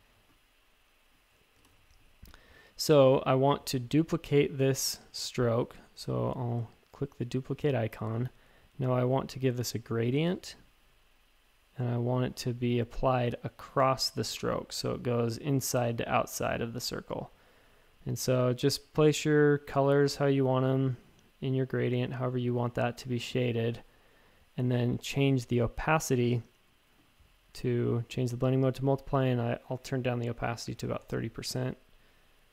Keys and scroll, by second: 1.6 shift+super+a, 30.5-31.5 typing.